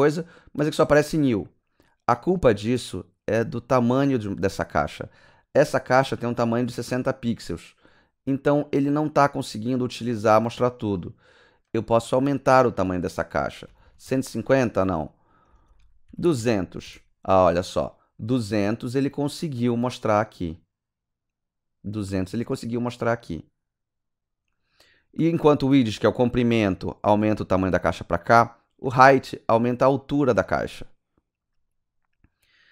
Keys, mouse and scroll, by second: 11.6 KP_Enter, 13.7 KP_1, 13.8 KP_5, 14.1 KP_0, 15.5-16.2 typing, 16.8 KP_Enter.